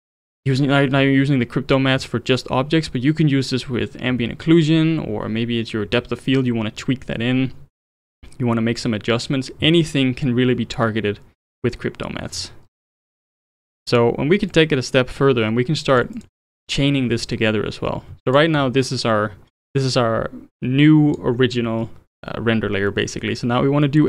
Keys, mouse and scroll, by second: 8.1 click, 12.3-12.9 scroll down 7, 12.9-13.5 middle drag, 13.5 click, 14.5-16.2 drag, 16.4 scroll up 3, 17.2-18.3 middle drag, 18.3 ctrl+shift+click, 19.5 scroll up 2, 20.5 click, 22.9-24.0 middle drag.